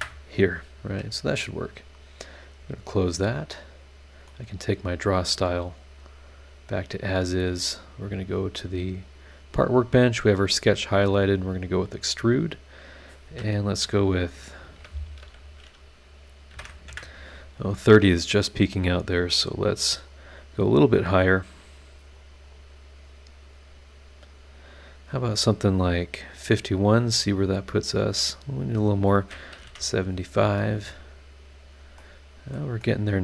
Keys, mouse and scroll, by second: 2.6 click, 3.2 scroll down 2, 3.5 middle click, 3.5 click, 3.5 right click, 6.0 click, 6.7 click, 8.1 click, 9.1 click, 9.5-10.4 scroll up 1, 11.5 click, 13.8 KP_Decimal, 15.2 BackSpace, 16.5 KP_3, 16.6 KP_0, 16.9 KP_Enter, 18.6 click, 20.1 click, 21.3 click, 22.1-25.6 drag, 27.5 click, 29.5 KP_7, 29.6 KP_5, 31.0 click, 32.0 middle click, 32.0 click, 32.0 right click, 32.8-33.2 middle drag, 32.9-33.2 drag, 32.9-33.2 right drag.